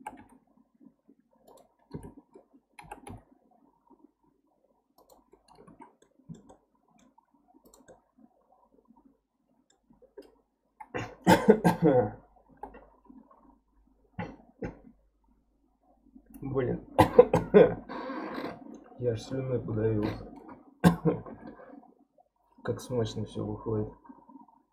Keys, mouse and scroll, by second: 5.7 alt+z, 6.0-7.6 middle drag, 7.6 click, 7.9-11.0 middle drag.